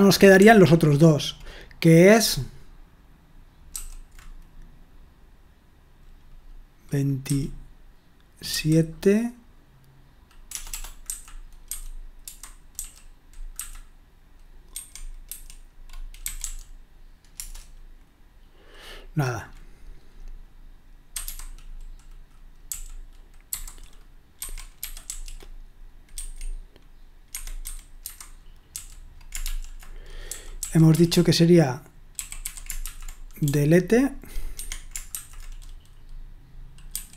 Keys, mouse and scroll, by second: 0.0-0.4 typing, 7.2 typing, 8.5 typing, 10.5-17.3 typing, 20.9-26.1 typing, 27.3 Escape, 27.4-31.1 typing, 32.1-33.4 typing, 34.5-35.1 typing, 36.9-37.1 typing.